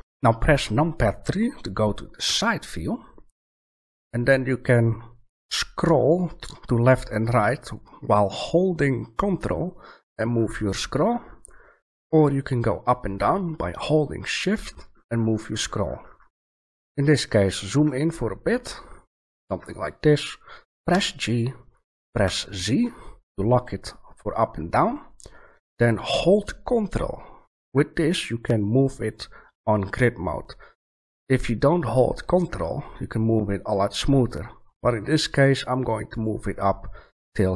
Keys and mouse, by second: 2.2 KP_3, 9.4-13.5 middle drag, 14.6-19.4 middle drag, 20.9 middle click, 20.9 g, 36.2-37.5 drag.